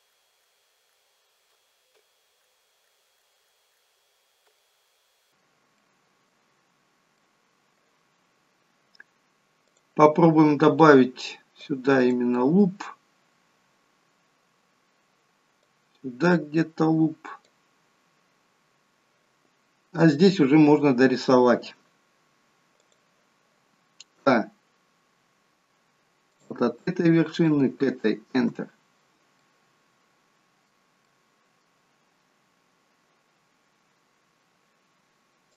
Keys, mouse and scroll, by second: 0.1 shift+click, 0.4 shift+click, 0.9 shift+click, 2.4 click, 2.4 f, 2.8 click, 3.2 shift+click, 3.4 shift+click, 3.7 shift+click, 4.5 f, 4.7 scroll down 2, 4.9 middle click, 5.8 middle click, 6.6-7.1 scroll up 2, 7.1 middle click, 9.7 click, 11.6 click, 15.6 click, 19.7-20.8 scroll up 1, 20.8-21.9 scroll down 1, 22.7 click, 24.1 k, 29.3 middle click, 31.0 middle click, 34.8 k.